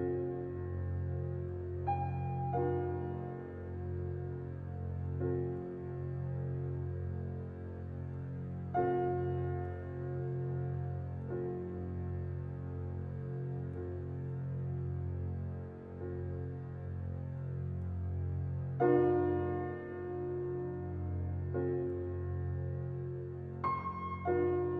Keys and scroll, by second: 19.3 ctrl+i.